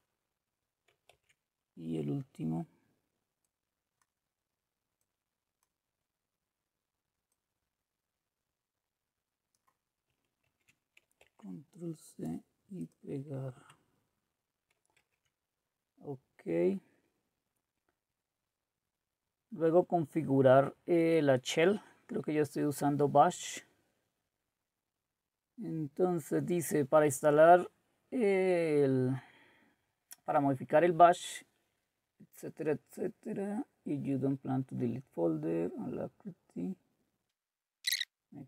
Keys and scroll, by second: 1.2 alt+Tab, 10.4 ctrl+c, 11.3 alt+Tab, 13.5 Return, 15.0 alt+Tab.